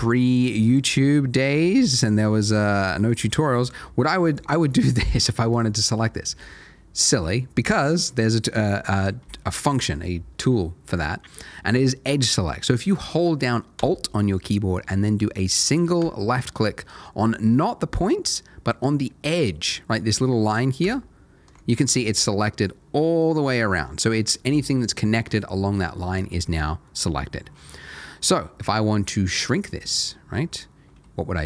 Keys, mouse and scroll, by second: 1.1 shift+middle click, 1.9 shift+click, 2.4 shift+middle click, 3.0 shift+click, 5.1 middle click, 15.0-15.3 scroll up 1, 16.0-16.5 scroll up 1, 20.8 alt+click, 21.7 scroll down 1, 22.0 middle click, 27.3-27.7 scroll up 1, 27.7 middle click.